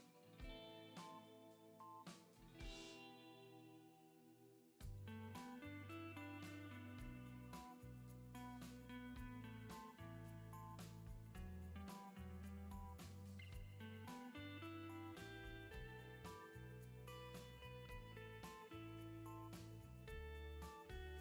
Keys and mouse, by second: 1.1 click, 7.1 ctrl+z, 12.0 click, 18.9 middle click.